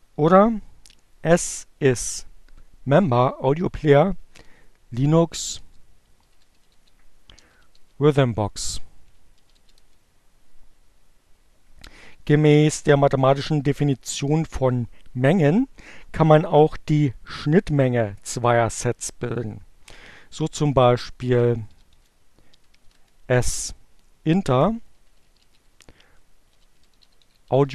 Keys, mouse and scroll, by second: 1.5 Up, 4.1 BackSpace, 5.4-9.1 typing, 9.2 Return, 19.4-23.2 typing, 24.4-27.7 typing.